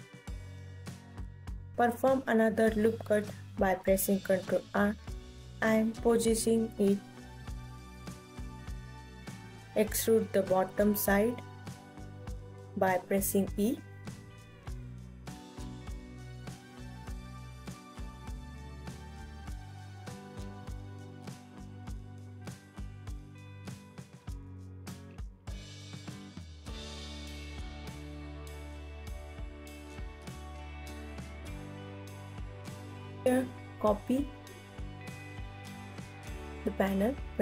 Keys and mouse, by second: 0.0 ctrl+r, 3.2 click, 3.9-5.7 alt+middle drag, 5.7 alt+click, 7.1 click, 8.1 x, 9.9 click, 12.1 KP_1, 13.2 KP_2, 13.4 KP_3, 13.9 e, 17.1 alt+click, 17.9 alt+click, 18.6 KP_1, 19.6 alt+click, 20.5 click, 20.9 click, 22.7 click, 23.2 g, 26.5-27.6 alt+drag, 27.9 ctrl+s, 30.0 Tab, 30.3 KP_1, 30.7 click, 31.0 ctrl+s, 31.1 alt+z, 31.4-33.4 typing, 34.4 alt+middle click, 35.3 ctrl+s, 35.5 KP_1, 36.9 click, 37.1 s, 37.2 x.